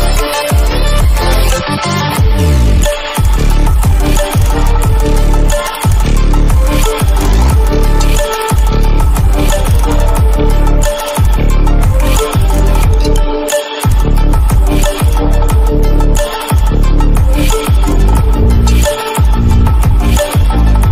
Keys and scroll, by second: 0.3 ctrl+-.